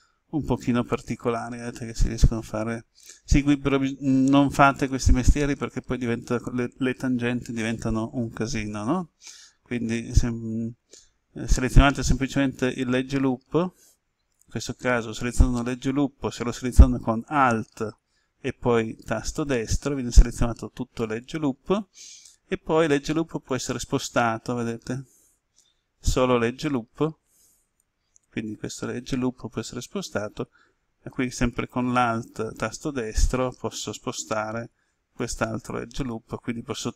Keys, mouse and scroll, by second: 7.6 right click, 19.2 alt+right click, 23.4-28.0 drag, 30.2 alt+right click, 35.2-36.9 drag.